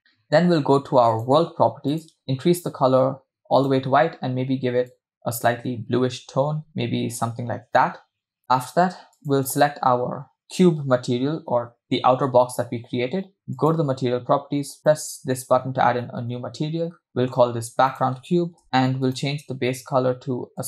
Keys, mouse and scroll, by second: 1.1 click, 2.0 click, 9.1-11.8 drag, 14.8 click, 15.2 click, 16.4-16.9 scroll down 3, 16.9-17.5 scroll up 2, 17.9 click, 19.2 click.